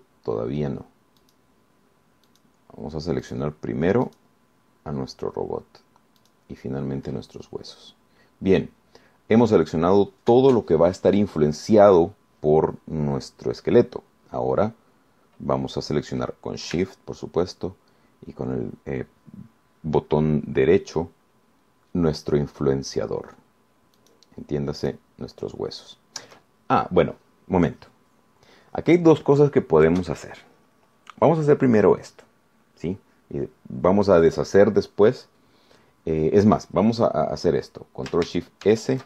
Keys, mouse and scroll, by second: 0.8 shift+right click, 2.4 shift+right click, 3.5 shift+right click, 4.4 shift+right click, 5.3 shift+right click, 7.4 shift+right click, 8.5-9.6 shift+scroll down 2, 25.2 shift+right click, 26.0 shift+right click.